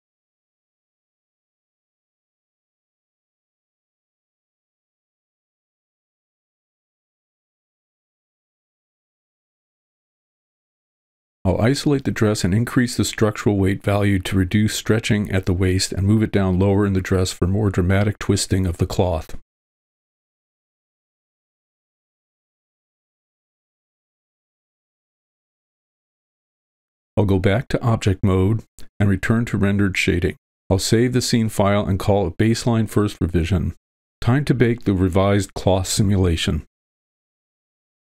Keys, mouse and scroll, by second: 1.0 click, 1.6 middle click, 2.2 shift+space, 2.6 shift+space, 2.6 shift+space, 2.7 click, 3.2 f, 3.6 click, 4.5 middle click, 5.0 click, 5.5 middle click, 6.5-7.6 drag, 8.4 middle click, 8.4 alt+h, 8.8 shift+middle click, 10.3 middle drag, 11.0 click, 12.0 w, 12.3 ctrl+l, 13.0 shift+h, 13.5 middle click, 14.1 click, 14.5 click, 16.1 f, 16.5 click, 17.5 middle click, 18.0 click, 20.0 shift+space, 20.3 shift+space, 20.7 f, 21.2 click, 22.1 middle click, 22.7 click, 23.7 click, 24.1 middle click, 24.4 click, 25.0 middle click, 25.5 alt+h, 26.3 v, 26.7 middle click, 27.7-28.6 drag, 30.0 click, 30.5-31.4 drag, 34.9-35.5 scroll down 2, 35.5 KP_0, 35.8 click, 37.7 middle click.